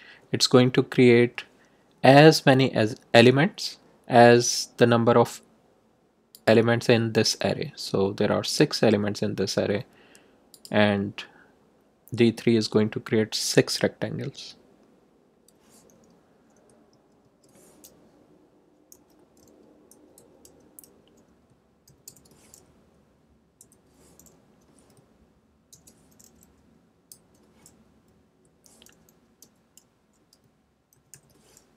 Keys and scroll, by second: 16.5 Return, 16.9 Tab, 18.7-20.4 typing, 21.6-22.5 typing, 23.5 Left, 25.6 shift+', 27.0 x, 28.2 Right, 29.4 ,, 30.7-31.5 typing.